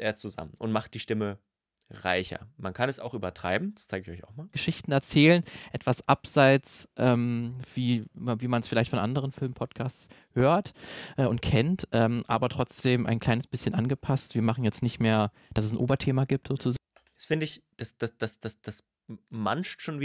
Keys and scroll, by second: 4.3 space, 16.5 space.